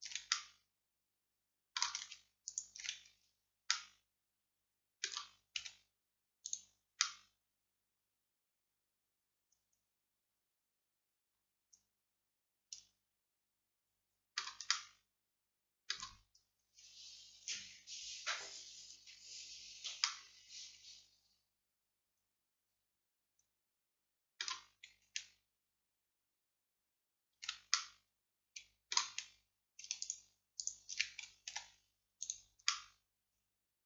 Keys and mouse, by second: 0.4-5.7 drag, 5.7 x, 7.1-11.5 drag, 14.8-33.8 drag, 31.6 x.